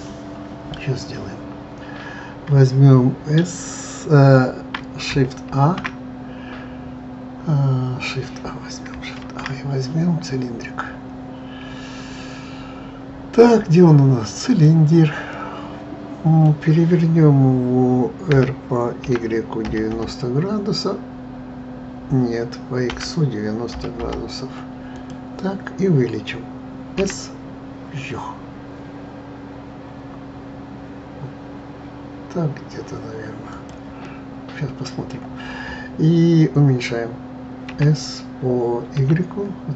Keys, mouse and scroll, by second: 5.5 shift+a, 9.2 shift+a, 15.3-18.3 middle drag, 18.3 r, 27.0 s, 34.0-37.1 middle drag, 37.7 s.